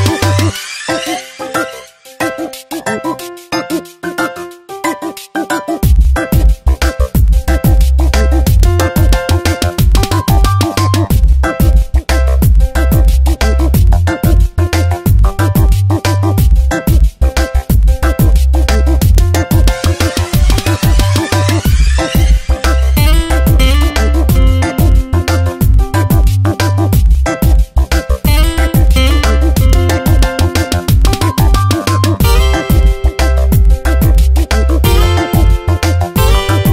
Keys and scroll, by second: 5.0 Tab, 22.1 Tab, 22.4 space.